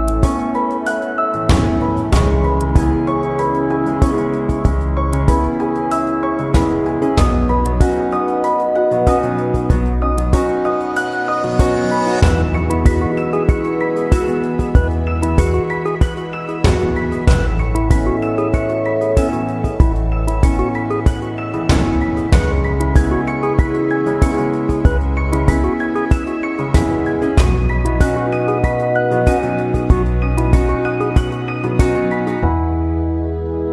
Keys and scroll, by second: 9.7 ctrl+z.